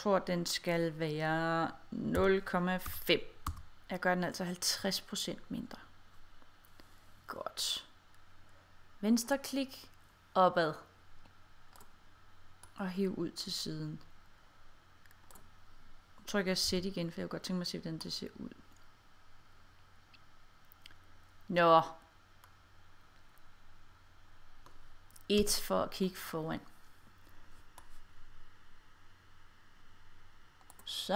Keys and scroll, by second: 2.9 5, 3.5 Return, 16.7 z, 25.4 1.